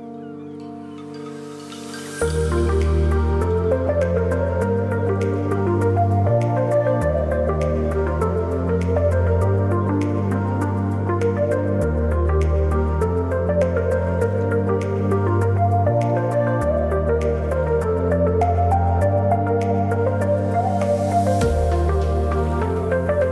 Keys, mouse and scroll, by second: 6.5-9.8 drag, 10.5-13.0 drag, 14.5 click, 18.1-23.3 drag, 22.4 typing.